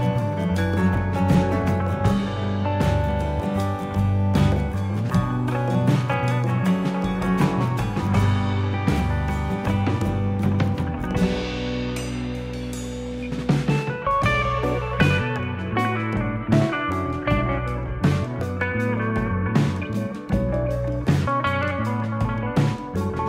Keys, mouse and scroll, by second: 1.2 click, 3.0 shift+click, 3.7 e, 4.8 click, 6.8 e, 7.9 click, 13.6 scroll up 2, 14.0 scroll down 1, 14.7 scroll down 4, 15.1 shift+middle click, 17.3 shift+middle click, 19.2-19.6 scroll up 1, 20.1 ctrl+r.